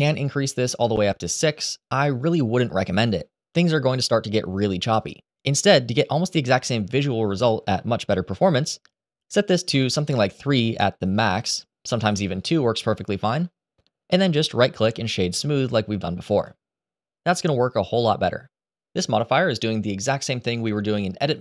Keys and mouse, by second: 0.6 click, 8.1-9.5 drag, 12.1 click, 14.0-16.2 middle drag.